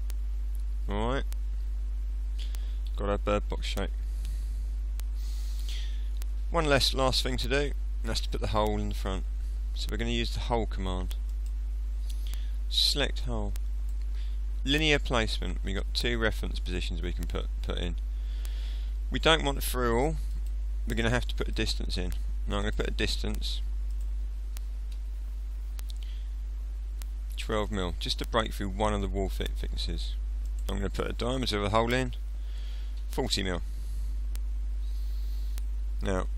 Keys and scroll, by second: 25.0 BackSpace, 27.0 1, 27.5 2, 31.5 BackSpace, 33.0 4, 33.3 0, 34.3 0.